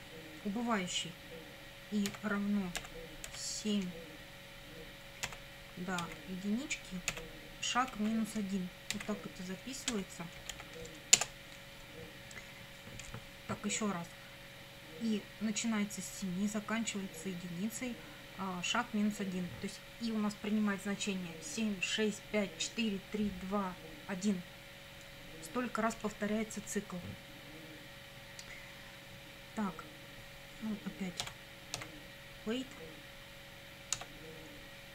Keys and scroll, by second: 2.1 i, 2.8 =, 3.3 7, 5.3 ,, 6.0 1, 7.1 ,, 7.9 -, 9.0-11.0 typing, 11.2 Return, 31.2 w, 31.8 a, 34.0 Tab, 34.7-34.9 typing.